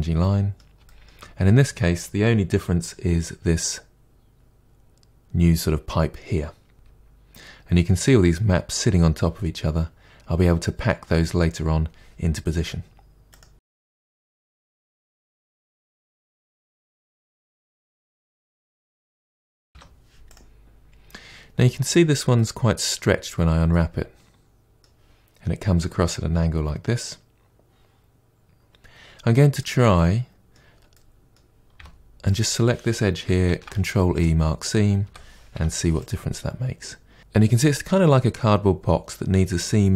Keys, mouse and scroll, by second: 0.1 3, 0.4 shift+middle click, 0.8-1.6 scroll down 3, 1.0 middle click, 1.3 shift+middle click, 1.6-5.4 middle drag, 5.4 2, 5.6 alt+click, 5.9 ctrl+e, 6.0 middle drag, 6.3 3, 6.7 ctrl+e, 6.8 a, 7.1 u, 7.6-8.3 middle drag, 9.3-14.7 drag, 14.7 KP_Divide, 15.0 KP_Divide, 15.2 scroll down 7, 15.4 shift+middle click, 15.6-16.1 middle drag, 16.1-16.6 scroll down 2, 16.2 shift+middle drag, 16.6-16.9 shift+middle drag, 16.9 click, 17.2 KP_Divide, 17.7-18.4 middle drag, 18.9 middle click, 19.0 Tab, 19.0-19.5 middle drag, 19.5 a, 20.3 u, 22.3-23.2 middle drag, 23.2-23.6 scroll down 1, 23.6-31.7 middle drag, 31.7 2, 32.2 click, 34.1 ctrl+e, 35.0 a, 36.0 u.